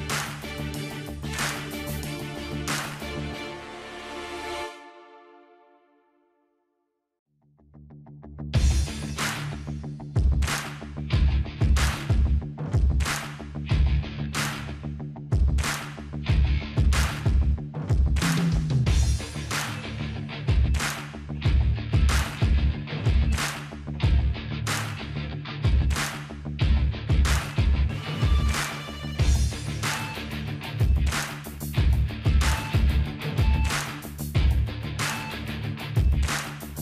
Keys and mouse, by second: 0.0 click, 0.0 KP_0, 0.9-2.4 drag, 2.0 ctrl+b, 5.0-9.0 drag, 5.0 KP_0, 7.8 alt+h, 8.9 ctrl+s, 9.0-11.1 middle drag, 11.3-13.5 middle drag, 11.9 KP_0, 13.5 z, 14.1 middle click, 14.8 ctrl+s, 15.2-17.3 middle drag, 17.0-18.0 drag, 17.7 Tab, 18.6 ctrl+r, 18.6 middle click, 22.4 click, 22.9 z, 24.5 click, 25.4 z, 26.1 z, 26.7-27.8 drag, 27.0 z, 27.6 z, 27.9-30.0 middle drag, 29.6-30.6 drag, 31.1 p, 31.9-33.4 drag, 32.3-33.6 middle drag, 33.6 click, 33.9 Tab, 34.1 Tab, 36.0 Tab, 36.0 middle click, 36.0 click, 36.3 middle click, 36.5 ctrl+r.